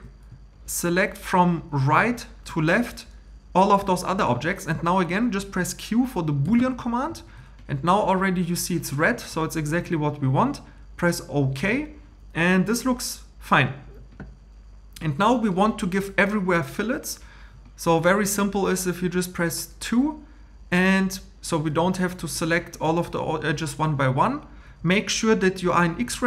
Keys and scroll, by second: 6.4 q.